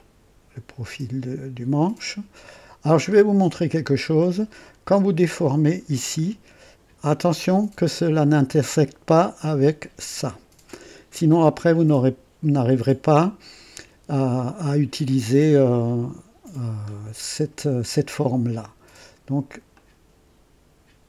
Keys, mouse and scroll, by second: 3.0-3.4 scroll up 1, 3.5 right click, 4.2 scroll up 1, 4.6-5.3 right drag, 6.0-8.4 drag, 8.7-9.0 scroll up 1, 9.2-9.7 right drag, 17.0 scroll down 1, 19.7-21.0 drag.